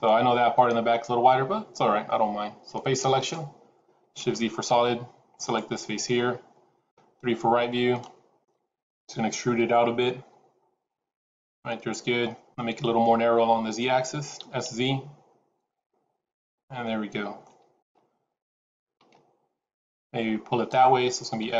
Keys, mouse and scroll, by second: 1.4 scroll up 1, 3.0 click, 4.3 shift+z, 5.3 click, 6.8 KP_3, 7.8 shift+middle click, 9.5 e, 12.1 middle click, 14.3 s, 16.8 middle click, 19.0 middle click, 21.3 s.